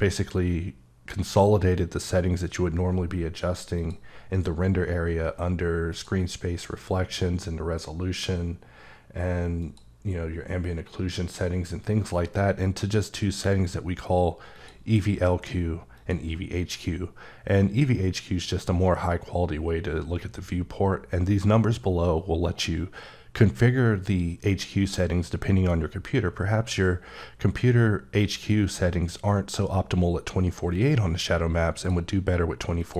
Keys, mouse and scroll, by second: 3.8 click, 5.9 click, 9.6 click, 12.8 click, 14.6 click, 16.0 click, 31.8 click, 32.8 click.